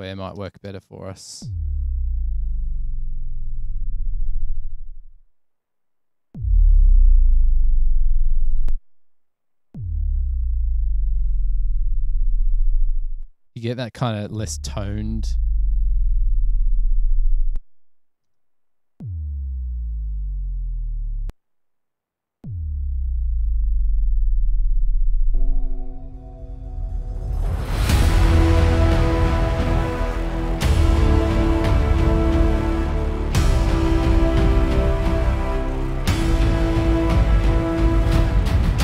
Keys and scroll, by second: 0.4 space, 0.7 space, 5.4 space, 5.5 space, 8.8 space, 9.0 space, 13.3 space, 13.5 space, 17.6 space, 18.3 space, 21.4 space, 21.7 space, 35.0 super+=.